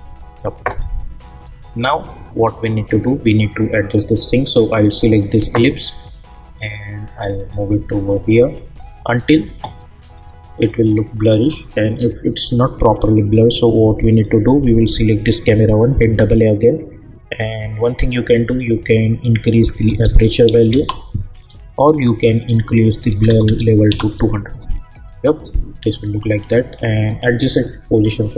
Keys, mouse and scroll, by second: 1.4-2.8 scroll up 1, 2.8-10.1 drag, 14.6 click, 16.0 typing, 18.1 click, 20.7 Return, 22.4 click, 23.9 Return, 25.9-28.3 drag.